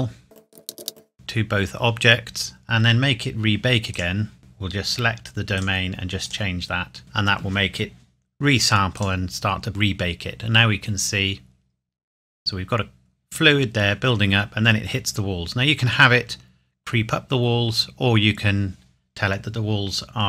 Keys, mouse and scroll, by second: 0.8 ctrl+a, 0.9 click, 3.9 click, 9.0 click.